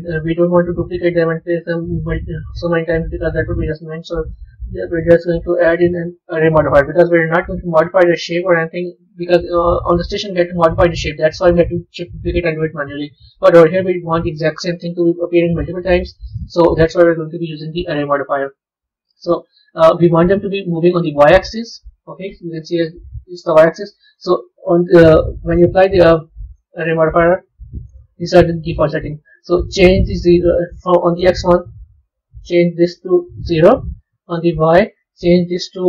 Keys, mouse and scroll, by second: 4.8-7.8 drag, 9.6 middle click, 10.3-12.9 scroll up 6, 12.9 scroll down 2, 15.4 KP_1, 16.4 KP_3, 17.8-19.2 scroll up 3, 20.1 scroll down 2, 23.9-25.5 drag, 26.4-31.1 drag, 32.2-35.8 drag.